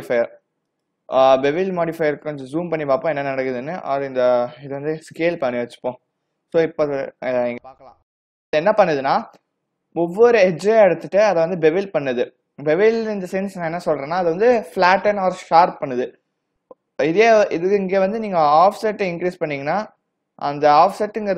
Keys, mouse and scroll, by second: 1.6-2.2 scroll up 7, 3.8-4.3 scroll down 6, 4.3 s, 7.0 w, 7.4 click, 18.7 click.